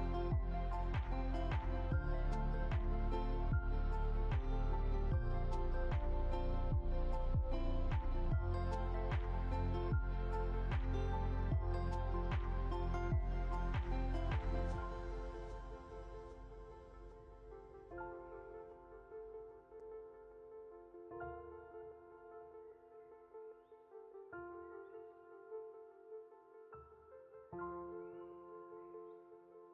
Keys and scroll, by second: 28.8 ctrl+z.